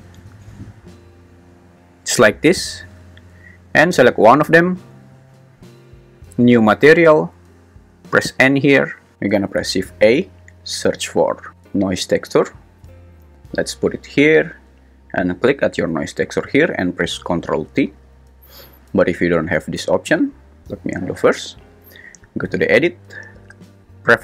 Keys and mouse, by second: 4.4 g, 5.0 Escape, 8.1 n, 9.7 shift+a, 15.5 g, 18.2 ctrl+t, 22.7-24.2 super+drag.